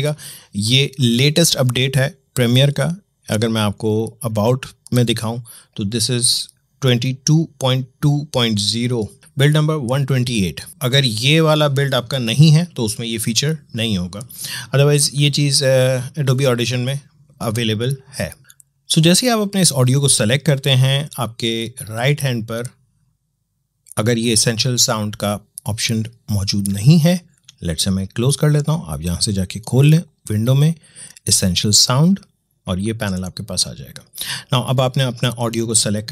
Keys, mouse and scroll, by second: 2.2 click, 4.6 click, 14.6 click, 17.4 click, 18.4 click, 26.6 click, 29.9 click, 32.5 click, 35.1 click.